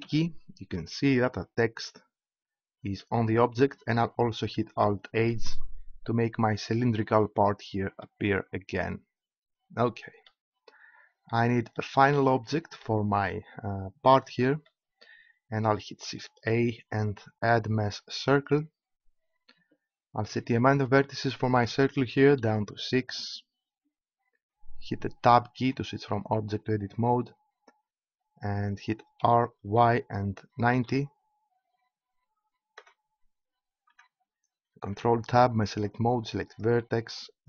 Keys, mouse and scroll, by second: 0.0 z, 5.1 alt+h, 16.4 shift+a, 20.8-23.3 drag, 25.6 Tab, 29.1 r, 29.6 y, 30.6 9, 31.0 0, 32.8 Tab, 33.9 Tab, 34.9 ctrl+Tab.